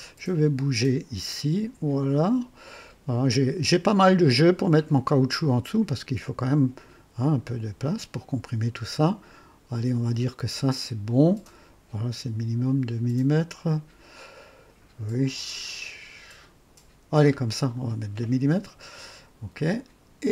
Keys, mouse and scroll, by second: 0.1-0.8 scroll up 3, 12.4 scroll down 2, 19.5 click.